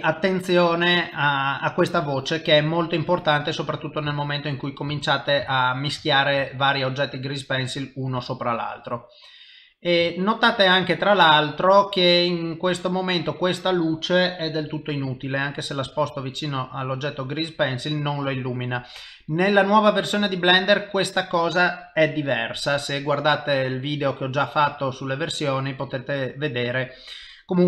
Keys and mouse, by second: 0.2 click, 3.0 ctrl+middle click, 4.2 shift+middle click, 5.0 ctrl+middle click, 5.5 shift+middle click, 6.0 ctrl+middle click, 6.5 shift+middle click, 6.9 middle click, 8.3 shift+middle click, 8.8 middle click, 10.1 shift+middle click, 10.5 middle click, 11.3 s, 12.7 click, 13.0 middle click, 14.6 g, 15.6 middle click, 16.5 g, 17.5 middle click, 18.3 g, 19.3 middle click, 20.3 g, 21.3 middle click, 23.7 middle click, 26.7 middle click.